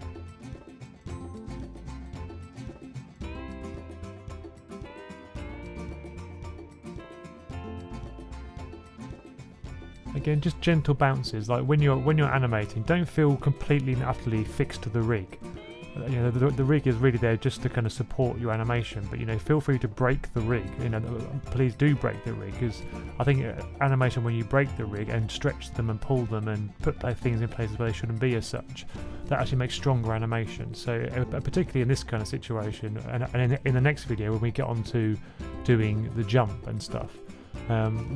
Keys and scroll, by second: 0.4 super+c, 0.5 super+v, 0.6 super+v, 2.1 2, 4.4 F6, 4.5 F6, 4.5 F6, 4.6 F6, 5.0-6.9 typing, 8.4 typing, 10.5 1, 11.5 super+s, 14.0 F6, 14.1 F6, 17.0 F6, 17.4-18.1 typing, 24.9 super+c, 25.1 super+v, 31.1 F6.